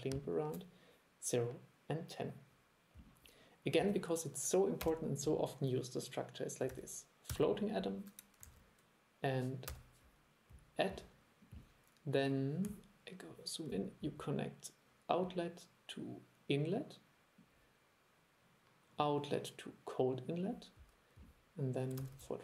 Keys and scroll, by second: 6.8 super+1, 8.6 super+1.